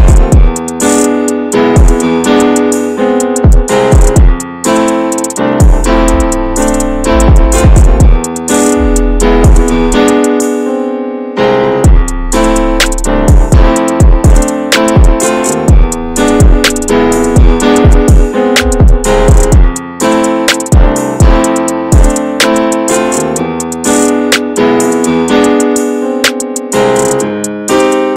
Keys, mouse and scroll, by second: 4.2-4.6 scroll down 3, 4.6 middle click, 5.1-5.5 scroll down 2, 5.5-6.7 scroll up 6, 6.1 shift+middle click, 6.7 ctrl+z, 16.8-18.4 drag, 18.4-18.7 scroll down 2, 19.2 shift+middle click, 19.4-19.9 scroll up 4, 19.9-20.6 scroll down 10, 20.6 shift+middle click, 21.6 shift+middle click, 22.4-22.9 scroll up 6, 22.9 middle click, 23.5-24.1 scroll up 2, 24.7 shift+middle click, 25.3-25.9 scroll up 2, 25.9-28.1 drag.